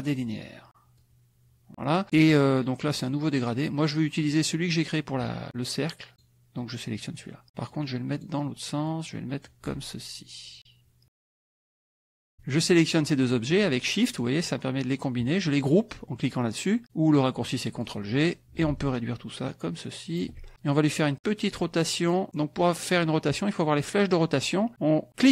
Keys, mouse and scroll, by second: 1.0-2.1 drag, 2.9 click, 6.1 click, 7.7 click, 8.9 click, 10.5 ctrl+click, 11.7 ctrl+click, 13.2 shift+click, 17.8 click, 18.9-20.4 ctrl+shift+drag, 25.2 click.